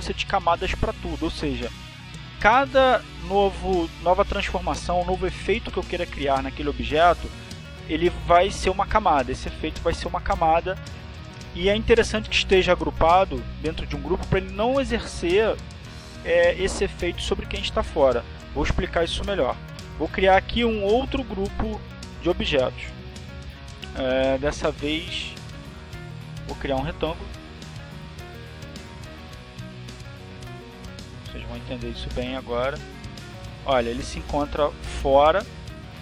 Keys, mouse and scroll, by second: 5.5 click, 23.1 click, 26.4 click, 28.3 click, 29.0 click, 29.7 click, 30.5 click, 32.3-34.6 drag.